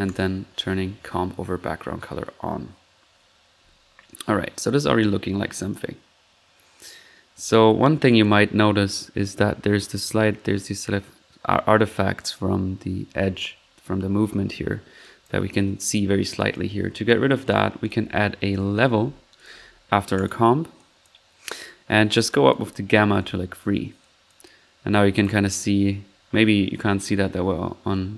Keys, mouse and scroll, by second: 0.0 click, 0.4-1.5 drag, 3.0 middle click, 3.6 1, 7.6 click, 7.7 middle click, 8.1-8.6 drag, 13.2 middle click, 14.5 middle drag, 15.0 click, 16.3-16.6 drag, 17.4-17.7 right drag, 17.8 click, 17.9 right click, 18.1-19.0 typing, 19.4 drag, 20.2-20.6 drag, 20.7 click, 22.2-22.7 drag, 24.0-24.4 drag, 25.1 click.